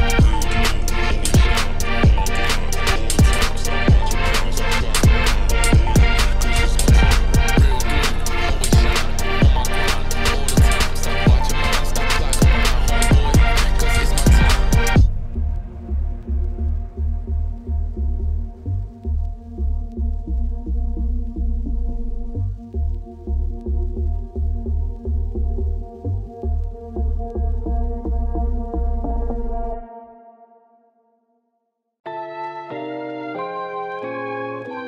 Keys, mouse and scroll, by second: 0.1 Tab, 0.3 click, 0.4 Tab, 0.8 2, 0.9 click, 1.2 shift+s, 1.4 Tab, 1.9 shift+a, 2.7 Tab, 2.9 r, 3.8 Tab, 3.9 g, 4.8 Tab, 4.9 s, 5.6 s, 11.2 middle click, 11.5 s, 14.6 i, 16.3 ctrl+z, 16.6 g, 17.7 i, 18.8 shift+middle click, 19.0 scroll up 5, 19.2 middle click, 19.8 e, 21.0 middle click, 24.2 middle click, 24.5 e, 26.7 scroll up 1, 26.8 2, 27.0 alt+click, 27.4 ctrl+b, 28.7 Tab, 29.0-29.4 scroll down 3, 29.4 middle click, 30.0 scroll up 2, 30.2 middle click, 30.8 scroll down 1, 31.0 Tab, 31.4 alt+click, 31.8 middle click, 32.2 scroll down 2, 32.4 middle click, 32.6 ctrl+b.